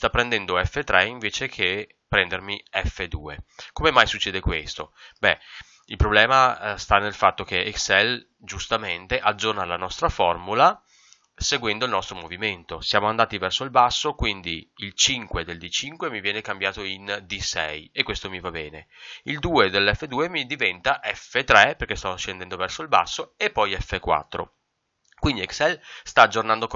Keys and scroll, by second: 3.7 Escape, 25.1 Escape.